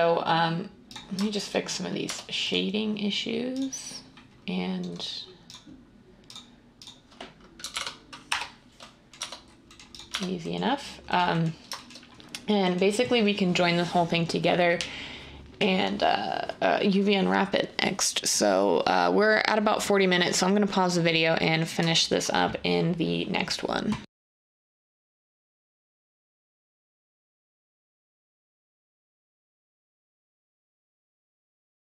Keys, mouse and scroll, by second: 2.1 Tab, 7.6 typing, 8.3 Return, 9.2 Tab, 10.1 Tab.